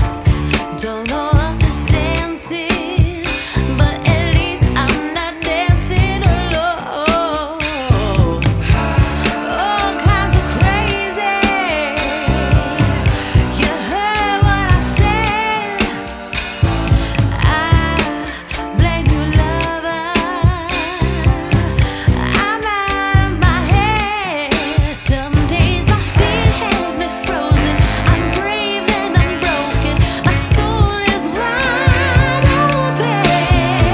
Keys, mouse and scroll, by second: 7.9 click, 18.4 click, 22.5 click, 24.1 click, 25.1 click.